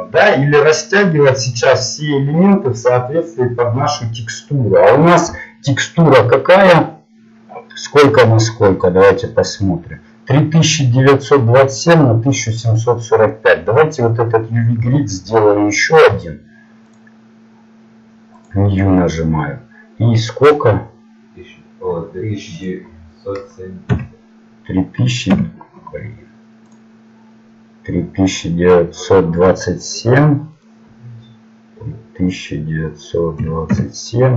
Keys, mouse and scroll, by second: 15.8 click, 26.7-31.0 drag.